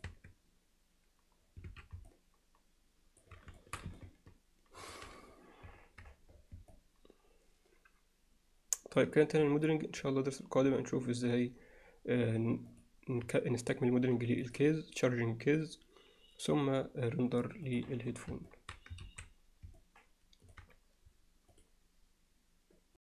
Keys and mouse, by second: 0.7 Tab, 1.7 alt+a, 2.1-3.2 alt+middle drag, 3.6 alt+shift+middle drag, 4.0-4.9 ctrl+alt+middle drag, 6.8-9.0 alt+middle drag, 12.7 click, 17.7 click, 18.5 alt+middle drag, 19.0 ctrl+s, 19.8-20.6 alt+middle drag.